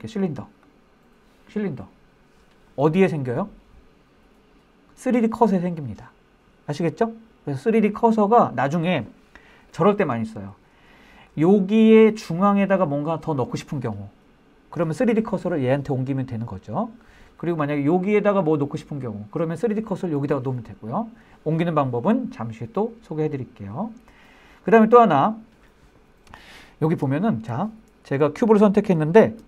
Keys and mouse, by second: 24.0 shift+middle drag, 24.4 middle click, 26.6-27.0 shift+middle drag.